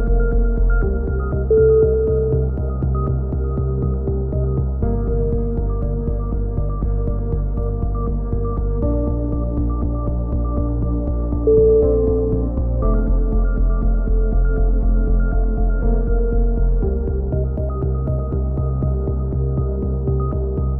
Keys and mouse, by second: 0.9 right click, 1.5 click, 2.7 a, 3.2-5.7 drag, 3.5 Tab, 4.3 z, 5.1 z, 6.2 Tab, 6.3 click, 7.3 click, 8.6 click, 9.5 a, 9.8 middle click, 10.9 Tab, 11.0 middle click, 11.4 click, 13.0 z, 13.6 Tab, 14.0 z, 14.3-15.3 drag, 15.3-16.3 middle drag, 17.1 k.